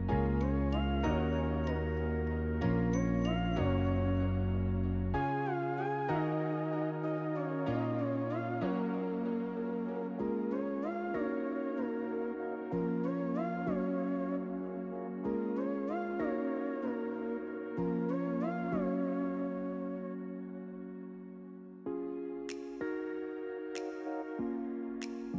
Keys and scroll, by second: 10.9-11.9 typing, 15.0 ctrl+c, 15.6 ctrl+f.